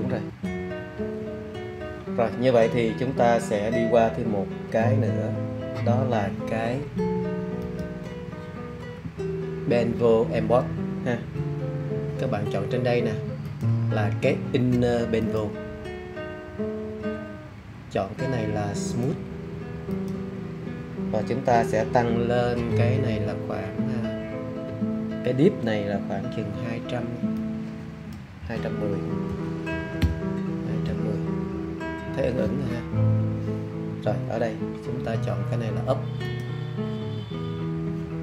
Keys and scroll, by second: 29.0-30.4 typing.